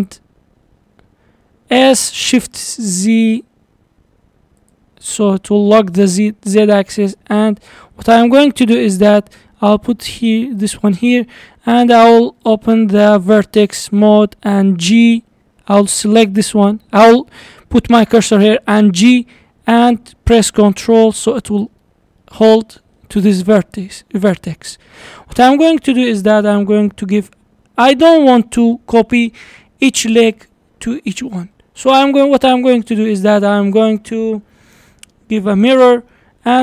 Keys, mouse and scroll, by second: 1.7 s, 5.0-5.7 middle drag, 5.7-6.4 scroll up 4, 6.8 g, 8.8-9.6 scroll up 4, 9.6 g, 11.0 scroll up 2, 11.3-12.5 shift+middle drag, 12.5-15.5 drag, 18.8 g, 21.9-22.2 scroll down 2, 22.2-23.2 middle drag, 23.2-23.8 scroll up 3, 23.8 scroll up 1, 24.1 scroll down 4, 24.3-26.1 middle drag, 27.6 click, 28.2-31.8 middle drag, 31.8 click, 35.6 drag, 36.1-36.6 middle drag.